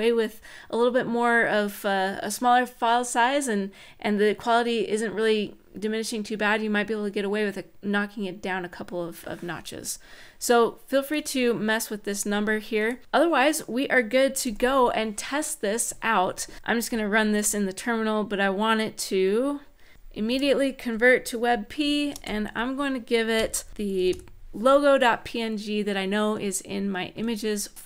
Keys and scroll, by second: 14.2 super+s, 19.7-20.4 typing, 21.8 shift+9, 22.9-24.2 typing, 26.9 Tab.